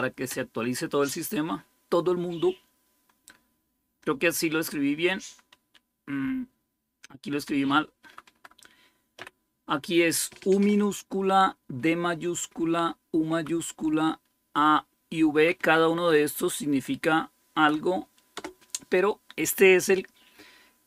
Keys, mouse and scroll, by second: 0.0-0.7 typing, 5.6-7.5 Left, 7.9 Right, 8.1 Right, 9.0 u, 11.7 Right, 13.2 Right, 13.7 Right, 15.2 Right, 15.4 Right, 15.8-17.3 Right, 18.2 Right, 18.2 Return.